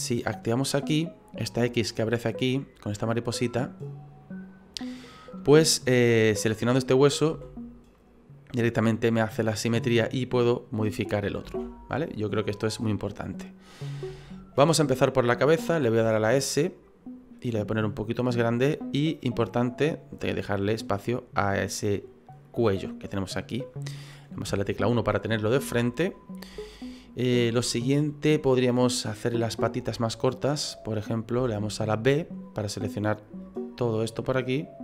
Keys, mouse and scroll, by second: 0.5 click, 6.3 right click, 7.3 s, 11.4 ctrl+z, 13.3-13.8 scroll up 2, 13.8 scroll down 1, 13.8-14.2 scroll down 2, 14.2 shift+middle click, 15.0 right click, 16.0 s, 18.8 click, 20.3-20.7 scroll up 4, 20.7 middle click, 21.0 middle click, 23.0 middle click, 24.5 KP_1, 25.2-25.7 scroll down 4, 25.8 shift+middle click, 31.4 b.